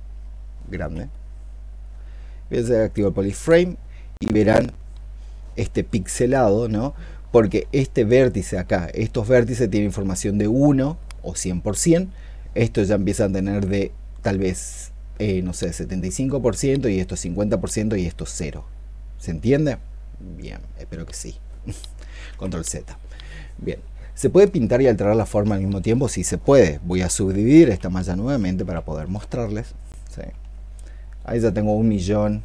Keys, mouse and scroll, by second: 0.0-0.7 i, 22.1 ctrl+z, 27.5 ctrl+d, 28.1 ctrl+d, 28.4 ctrl+d, 28.9 ctrl+d, 30.0 ctrl+d.